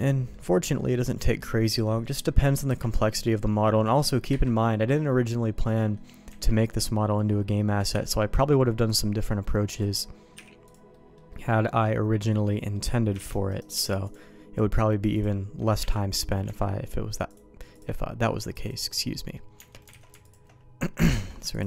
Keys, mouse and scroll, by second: 0.6 middle click, 0.9 middle click, 2.7 KP_Divide, 4.3 KP_Divide, 5.7 middle click, 6.3 Tab, 7.9 h, 8.9 click, 9.3 middle click, 9.7 click, 10.3 h, 10.6 click, 10.9 middle click, 11.3 middle click, 12.2 middle click, 13.2 shift+d, 13.7 m, 15.1 click, 15.8 Tab, 16.4 Tab, 17.3 click, 17.8 right click, 18.5 click, 19.1 middle click, 19.5 Tab, 20.0 alt+a, 20.2 alt+click, 21.1 ctrl+x, 21.5 alt+click.